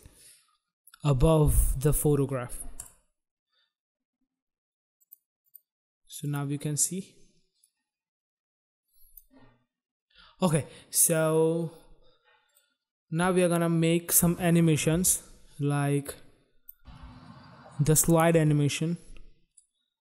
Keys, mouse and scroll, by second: 2.7 click, 3.0 click, 4.9 click, 5.4 click, 6.2 click, 6.4 click, 7.6 click, 12.4 click, 14.2 space, 14.9 space, 15.8 click, 16.8 space, 18.3 space, 19.4 click.